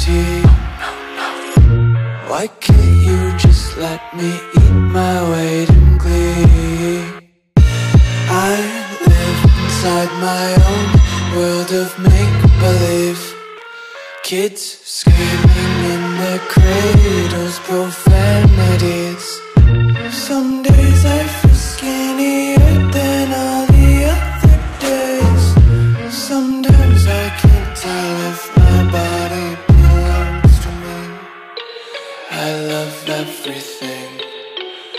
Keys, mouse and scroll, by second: 2.1 click, 5.7 scroll down 1, 7.4-8.4 scroll up 1, 9.3 scroll up 1, 9.3 click, 11.0 click, 12.1 click, 14.0 Return, 14.7 ctrl+s, 19.6 click, 24.5 click, 27.4 Return, 28.1 ctrl+s.